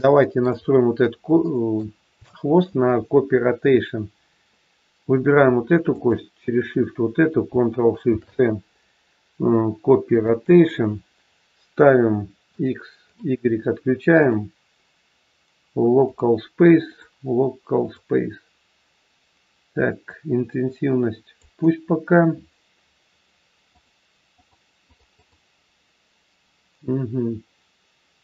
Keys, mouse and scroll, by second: 0.6-1.2 scroll up 2, 1.3 shift+middle click, 2.6 shift+middle click, 5.8 shift+click, 8.1 ctrl+shift+c, 12.5 click, 12.9 click, 19.9 click, 23.6 click, 24.3 click.